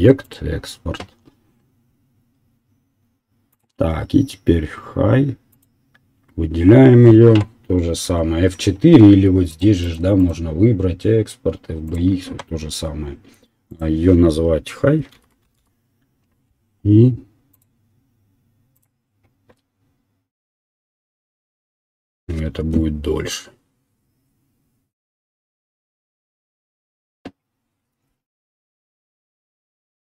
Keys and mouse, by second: 3.5 click, 8.0 F4, 9.5 click, 10.2-27.0 drag.